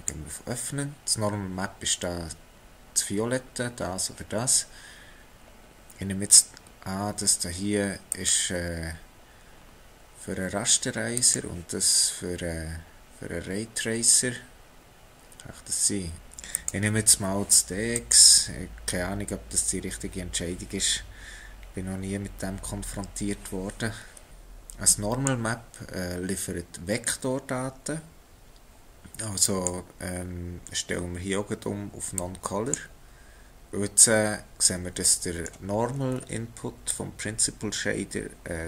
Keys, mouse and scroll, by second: 24.3 click, 29.4 click, 33.5-35.1 scroll up 2, 35.1 middle click, 35.7-36.1 scroll down 3, 36.9 click.